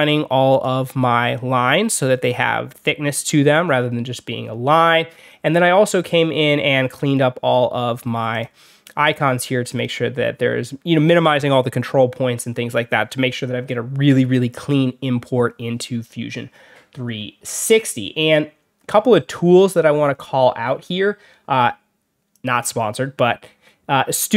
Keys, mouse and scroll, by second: 0.4 click, 2.0 alt+scroll up 2, 2.6 alt+scroll up 2, 3.2-3.9 alt+scroll down 4, 4.3 alt+scroll up 2, 5.1 alt+scroll up 2, 6.0-6.7 alt+scroll up 4, 6.9 click, 8.2 click, 8.9 click, 9.6 click, 16.4-17.7 alt+scroll down 4, 18.7 alt+scroll down 1, 19.2 alt+scroll up 1, 20.0 alt+scroll up 2, 20.5 alt+scroll down 2, 22.2 click.